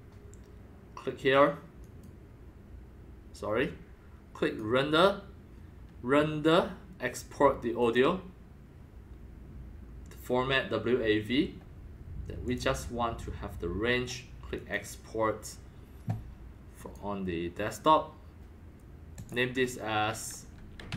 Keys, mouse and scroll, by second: 1.8 click, 4.4-7.6 drag, 7.8 click, 12.4 click, 13.4 click, 14.5 click, 14.8-16.5 drag, 16.7 click, 19.1 click, 20.5-20.9 typing.